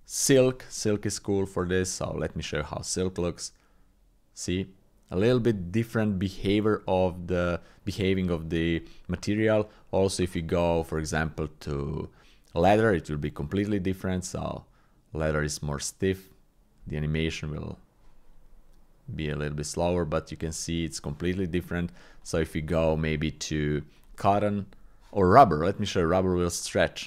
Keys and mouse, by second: 2.0 click, 9.4 click, 11.1-12.8 drag, 13.5 click, 23.1-24.3 drag, 25.9-27.0 drag.